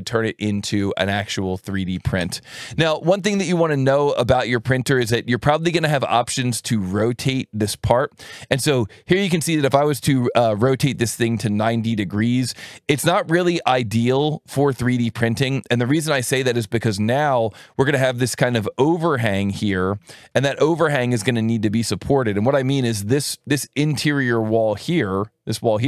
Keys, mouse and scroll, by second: 5.7 click, 7.0-11.0 drag, 14.0 click, 17.5 click, 19.1 click, 20.1 alt+1, 21.0 click, 24.6 click.